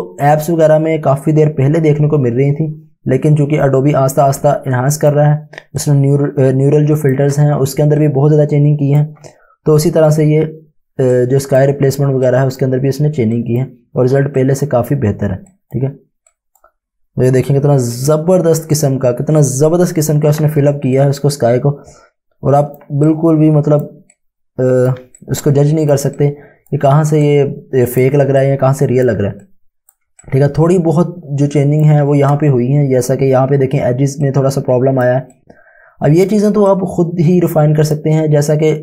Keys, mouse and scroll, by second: 0.0 click, 5.4 space, 5.8 click, 6.1 space, 8.0 click, 20.7 space, 21.0 click, 23.1 click, 27.3 click, 28.5 click, 28.7 Home, 30.2 ctrl+click, 34.0 space, 34.3 click, 34.4 space, 34.5 Home, 35.3 click, 35.6 space, 36.7 click.